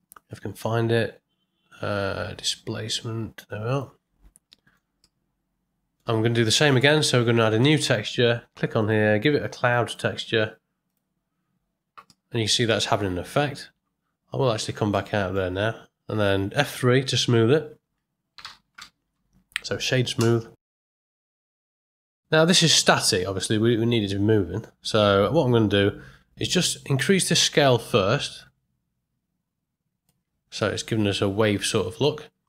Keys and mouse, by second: 4.5 ctrl+middle click, 5.0 middle click, 7.6 click, 8.8 click, 9.8-10.9 drag, 12.0 middle click, 14.0 z, 14.9 middle click, 17.1 F3, 21.2 middle click, 21.6-22.1 middle drag, 23.3-24.6 middle drag, 27.3-30.0 drag, 30.6-32.4 middle drag.